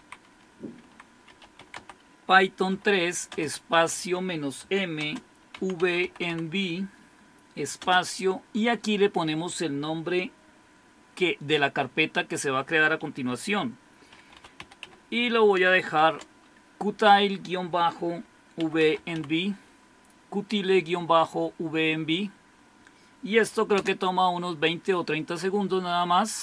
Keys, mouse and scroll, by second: 0.0-6.8 typing, 7.8 typing, 13.3-16.0 typing, 18.4-19.7 typing, 23.8 Return.